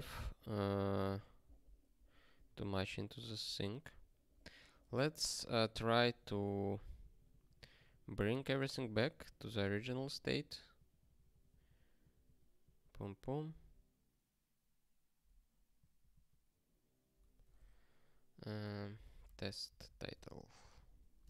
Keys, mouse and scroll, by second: 0.3 scroll up 4, 1.7 click, 2.5 super+w, 3.2 super+w.